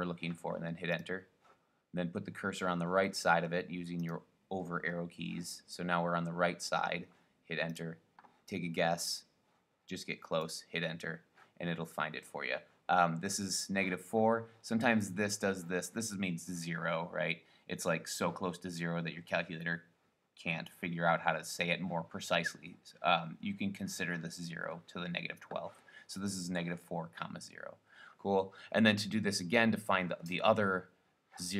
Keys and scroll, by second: 1.1 Return, 3.3 Right, 4.2 Right, 7.9 Return, 9.2 Left, 10.7 Return.